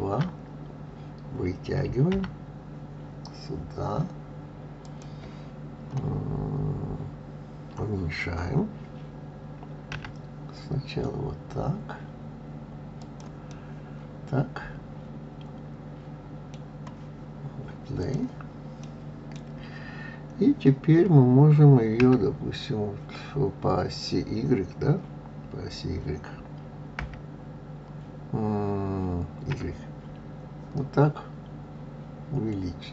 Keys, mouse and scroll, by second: 2.1 g, 13.5-16.5 middle drag, 18.0 click, 18.8-21.9 middle drag.